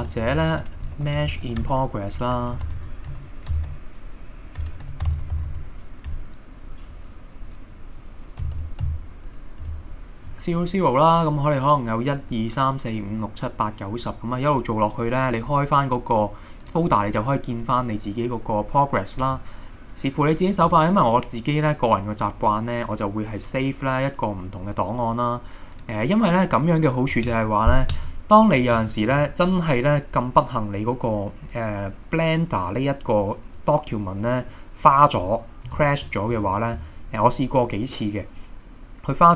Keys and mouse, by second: 0.0 BackSpace, 0.1 BackSpace, 0.5 BackSpace, 4.7 BackSpace, 5.5 s, 23.4-25.4 drag, 32.7-34.7 middle drag.